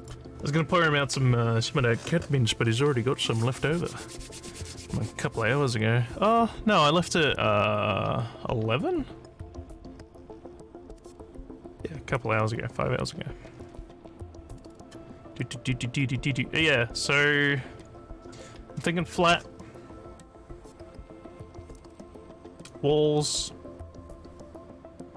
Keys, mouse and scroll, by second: 14.7 click.